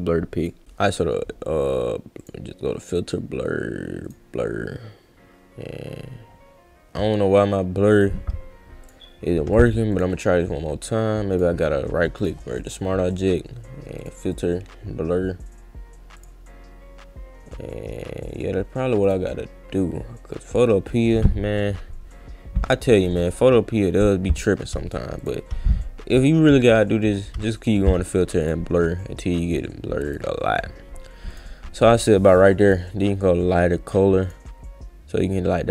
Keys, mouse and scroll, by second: 0.4 click, 2.2 click, 4.0 click, 8.8 click, 9.5 click, 9.9 click, 11.3 right click, 12.2 click, 14.0 click, 14.3 click, 16.1 click, 19.0 click, 23.0 click, 25.2 click, 26.6 click, 27.5 click, 28.1 click, 28.4 click, 30.1 click, 31.3 click, 32.7 click, 34.2 click.